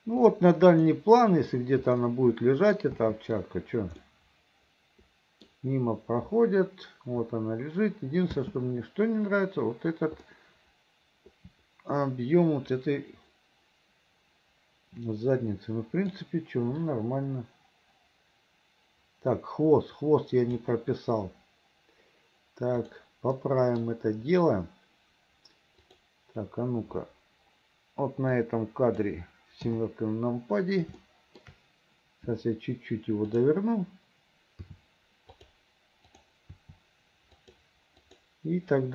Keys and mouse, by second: 0.8 click, 2.1 click, 2.2 middle click, 3.0 space, 4.1-5.6 middle drag, 8.4 space, 10.4-16.2 middle drag, 17.0-20.7 drag, 22.9 click, 23.4 middle click, 26.0 click, 28.4 click, 29.7 KP_7, 31.1 shift+click, 33.4 click, 34.7 r, 36.6 r, 38.1 click.